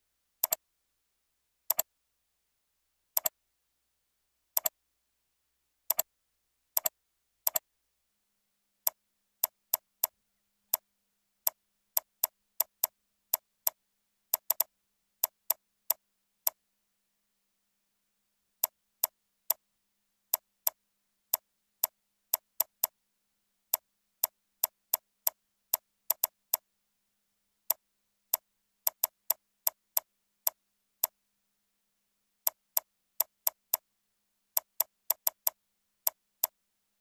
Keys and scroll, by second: 6.6 ctrl+c, 7.9 ctrl+a, 8.4 ctrl+v, 10.0 ctrl+c, 10.9 ctrl+a, 11.1 ctrl+v, 12.5 ctrl+c, 13.1 ctrl+v.